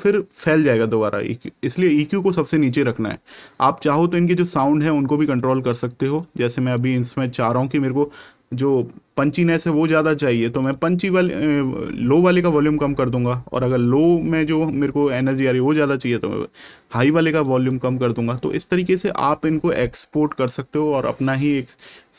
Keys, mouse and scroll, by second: 5.1 right click, 6.7 click, 10.5 click, 14.8 click, 17.6 right click, 18.8 click.